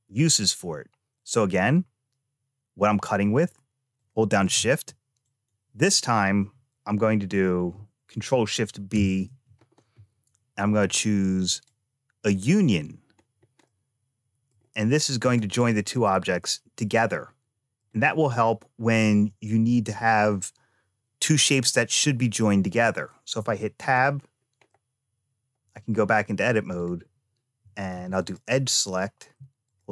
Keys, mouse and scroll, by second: 1.0 click, 3.8 shift+click, 5.0-6.9 right drag, 8.7 ctrl+shift+b, 13.0-13.5 scroll up 2, 13.5 middle click, 15.0 click, 15.4 click, 15.9-17.7 middle drag, 23.2 Tab, 23.8-24.5 scroll up 3, 24.5-25.8 middle drag, 26.6 click, 27.7 2, 28.1 click, 29.5 alt+click.